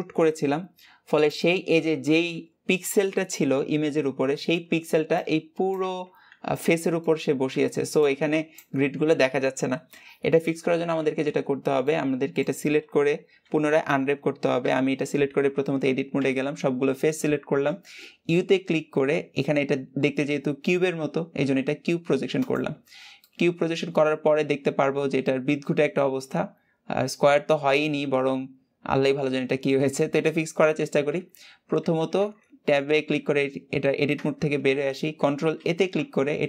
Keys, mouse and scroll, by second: 7.0-11.7 scroll down 3, 11.7-14.4 middle drag, 14.4 Tab, 23.0-26.0 middle drag, 33.9 Tab.